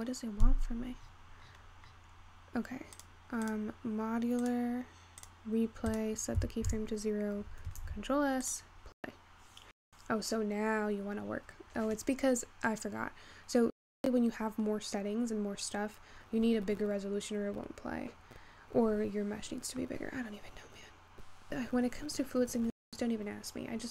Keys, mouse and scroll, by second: 0.7-3.0 scroll down 48, 3.0-7.9 drag, 7.9 ctrl+s, 8.4-14.4 drag.